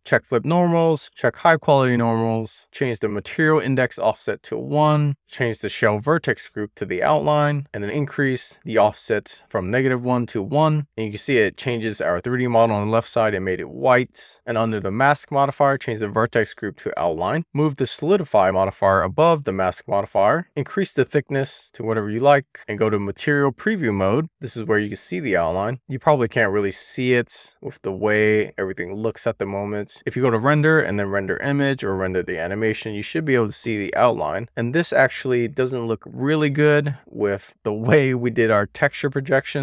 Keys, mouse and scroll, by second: 0.5 click, 1.4 click, 4.4 click, 5.7-7.4 drag, 9.0-10.1 drag, 14.2 click, 15.0 click, 15.3-17.2 drag, 18.3 click, 20.6 click, 20.9 click, 21.3 click, 22.9 click, 24.7-26.8 middle drag, 27.8 click, 29.9-34.4 drag.